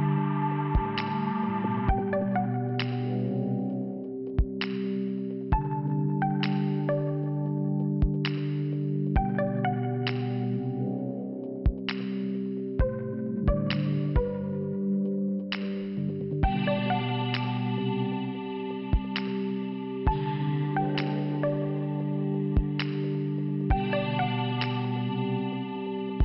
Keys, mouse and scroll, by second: 4.7 scroll up 1, 4.7 t, 6.8 click, 9.4 click, 13.9 click, 17.9 click, 18.0 click, 19.1 click, 22.6 click, 25.0 click.